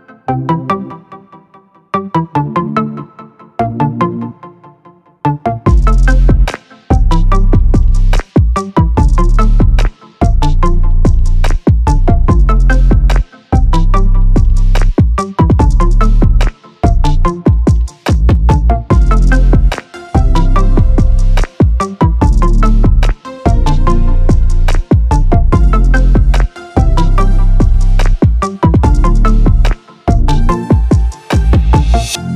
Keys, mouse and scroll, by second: 2.4 shift+click, 5.8 click, 10.9 ctrl+shift+g, 12.4 click, 13.6 KP_2, 15.6 click, 16.4 KP_3, 20.2 click, 21.0 KP_2, 22.6 click, 23.4 KP_3, 24.9 click.